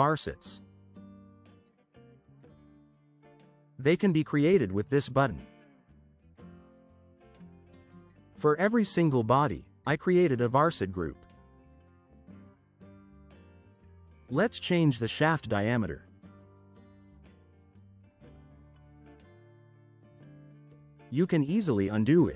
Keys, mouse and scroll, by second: 0.6 click, 13.1 click, 14.2 4, 14.7 Return, 21.2 click.